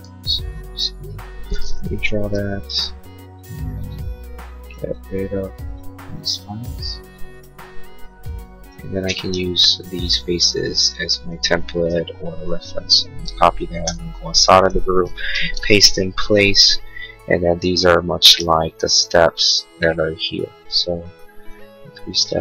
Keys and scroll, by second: 0.0 e, 0.8 e, 8.9 space, 13.2 ctrl+c, 13.9 Escape, 16.4 p.